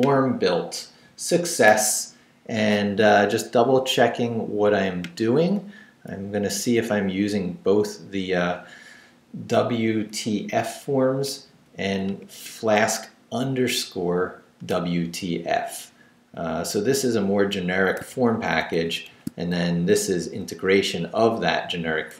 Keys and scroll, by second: 6.4 Down, 6.9 Up, 10.1 Up, 11.5 Up, 12.9 Left, 15.3 Down, 16.3 Up, 16.7 Left, 18.0 shift+Left, 20.3 Left, 20.7 Up, 21.1 Right.